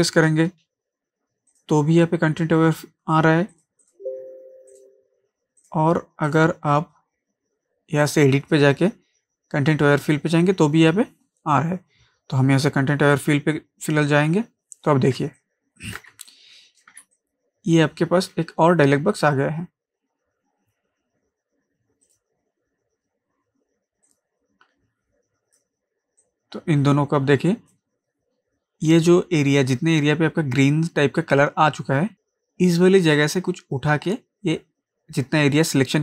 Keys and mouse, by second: 1.5 click, 13.1 click, 15.2 ctrl+space, 15.4 ctrl+click, 15.7 ctrl+space, 15.9 ctrl+space, 16.3 click, 16.6 space, 17.1 ctrl+click, 17.5 ctrl+space, 22.0-36.0 drag.